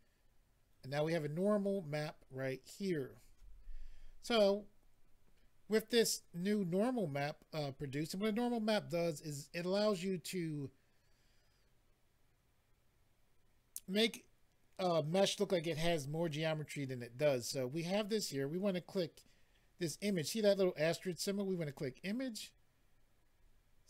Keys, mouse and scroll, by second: 21.7 click, 21.8 click.